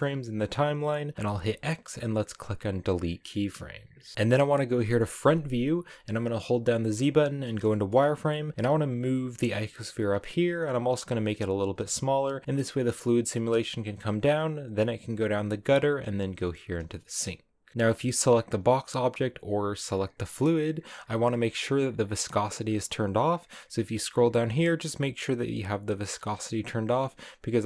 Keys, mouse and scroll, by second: 2.3 x, 3.3 click, 4.1-4.4 scroll down 6, 4.4 KP_1, 7.0 z, 7.3-8.4 shift+middle drag, 8.4 g, 11.3 s, 11.5 g, 16.2 g, 17.7 right click.